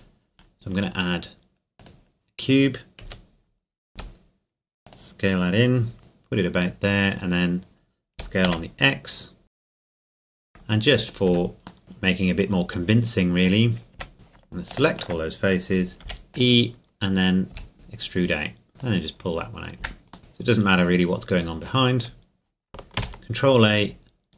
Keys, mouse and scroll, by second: 1.8 click, 3.0 KP_7, 3.9 s, 4.8 click, 5.2 scroll up 1, 6.0 g, 7.0 click, 7.3 scroll up 1, 8.1 s, 8.4 x, 9.4 click, 9.6 s, 9.7 click, 10.0 g, 10.1 shift+click, 10.1 x, 10.2 s, 10.3 click, 10.4 middle click, 11.2 Tab, 11.8 ctrl+click, 13.4 right click, 13.9 z, 14.1 click, 14.6 alt+right click, 16.0 e, 16.3-17.5 drag, 17.5 s, 18.7 right click, 18.8 click, 19.8 Tab, 20.2-21.9 middle drag, 22.0 right click, 23.0 ctrl+a.